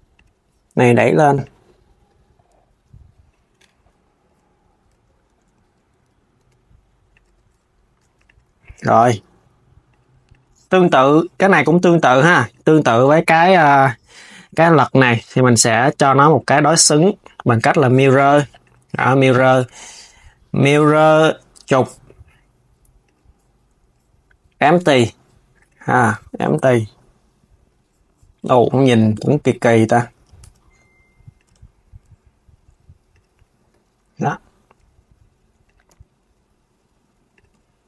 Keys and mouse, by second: 1.1 click, 3.2 Tab, 4.6 Tab, 5.2 KP_1, 6.0 r, 6.9 Tab, 7.6 s, 7.9 click, 8.1 KP_3, 8.6 g, 10.0 click, 12.2 click, 14.0 click, 14.9 s, 16.0-18.4 drag, 19.1-22.2 drag, 22.7 click, 25.2 click, 29.1 click, 29.8 Tab, 31.2 Tab, 32.8 click, 33.7 KP_1, 34.5 r.